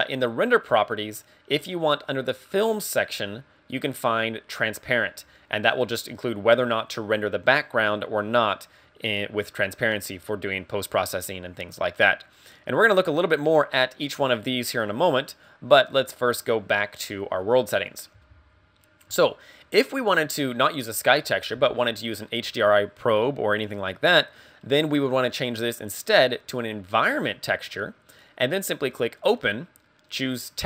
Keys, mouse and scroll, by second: 5.3 click, 13.2 click, 15.4 click, 17.5 click, 25.3 click, 28.8 click.